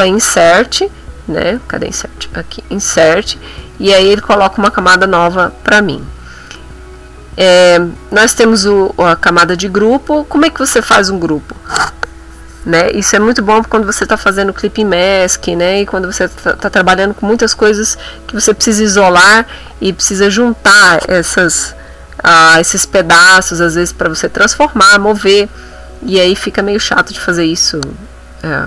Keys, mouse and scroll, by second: 2.2 Insert, 5.7 click, 6.9 click, 20.1 click.